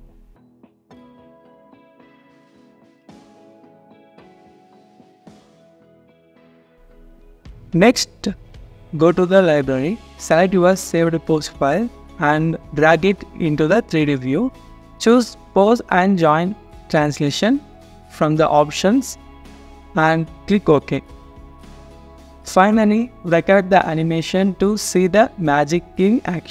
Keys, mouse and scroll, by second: 6.6 double click, 8.5-9.5 scroll down 1, 9.5 double click, 10.1-12.5 scroll down 1, 25.6 scroll down 1.